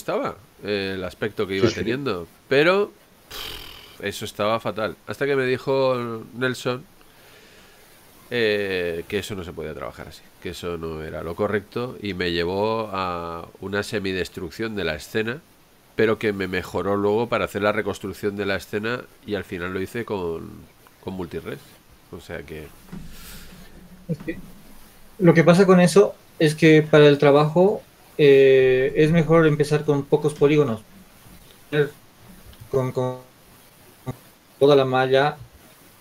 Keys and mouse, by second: 33.9 Tab, 35.9 g.